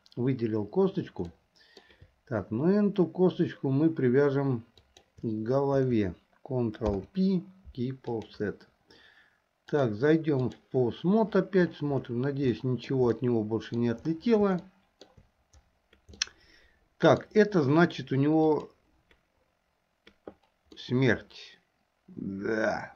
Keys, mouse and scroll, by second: 1.4 middle click, 4.8 shift+click, 6.9 ctrl+p, 9.8-10.8 drag, 12.7-13.2 shift+middle drag, 13.4-14.0 middle drag, 14.8-15.3 shift+middle drag, 16.3-17.4 middle drag, 18.7 click, 21.0-22.9 middle drag.